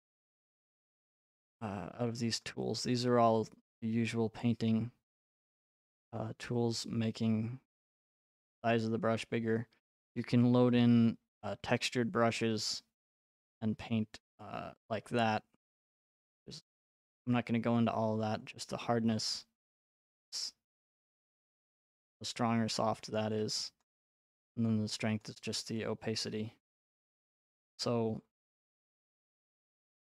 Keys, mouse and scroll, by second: 0.3 click, 6.0 click, 8.2 click, 10.1 click, 19.6 click, 21.1 click, 23.8 click, 25.2 click, 27.3 click.